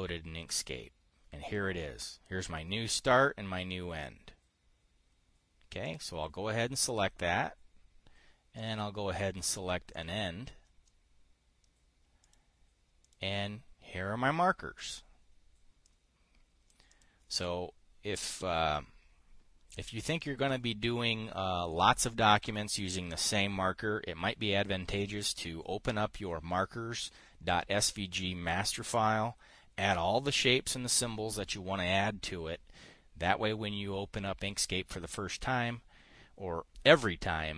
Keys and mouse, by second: 1.0 click, 6.3 click, 9.0 click, 10.4 click, 12.7 click, 13.5 click, 16.3 click, 17.4 click.